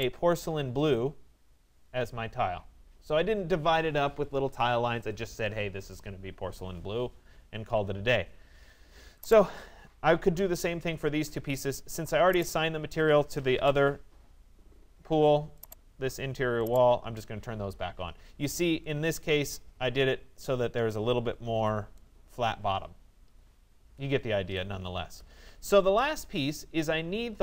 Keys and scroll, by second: 24.0 Escape.